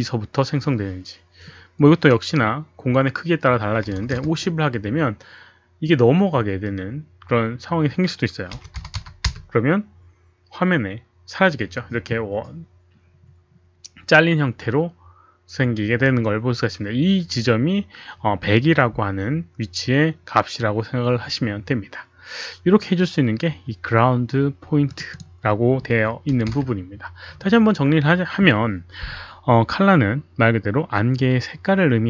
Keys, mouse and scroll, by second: 2.7 click, 2.7 KP_1, 3.9 Return, 3.9 KP_5, 3.9 KP_0, 3.9 KP_1, 8.5 KP_1, 8.8 KP_0, 14.8 Return, 14.8 KP_0, 14.8 KP_1, 15.0 Return, 15.0 KP_1, 16.7 Return, 24.8 click, 25.2 click, 26.3 KP_0, 26.5 Return, 31.2 Return, 31.2 click, 31.2 KP_0.